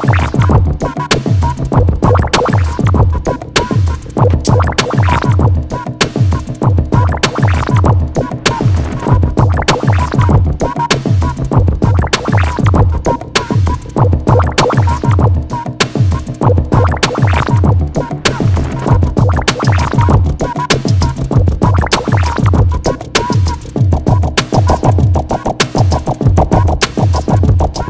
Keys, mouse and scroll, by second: 1.4-6.9 drag, 6.9-10.4 alt+shift+drag, 10.4-13.4 shift+drag, 13.4 alt+click, 15.5 alt+scroll up 1, 15.6 alt+scroll down 1, 17.4 click, 18.7 click, 21.2-23.4 typing, 23.6 ctrl+z, 24.1-27.8 drag.